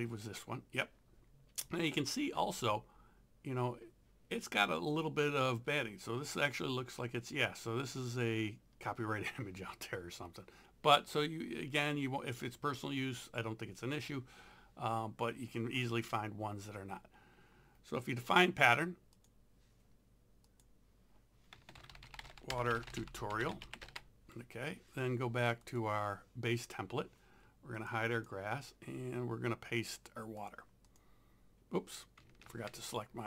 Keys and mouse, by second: 19.2 click, 21.5-24.1 typing, 25.6 click, 27.8 click, 30.4 click, 32.5 ctrl+z.